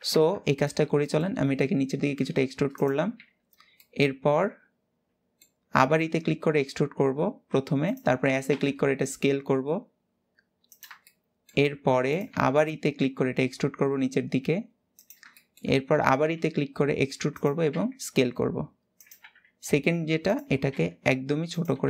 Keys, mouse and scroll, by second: 0.7 shift+middle click, 1.2-1.6 scroll down 1, 1.6 g, 2.7 w, 2.9 w, 3.5-5.5 middle drag, 5.5 e, 10.7 shift+middle click, 11.4 s, 15.0 shift+middle click, 15.5-15.9 scroll up 1, 15.9 e.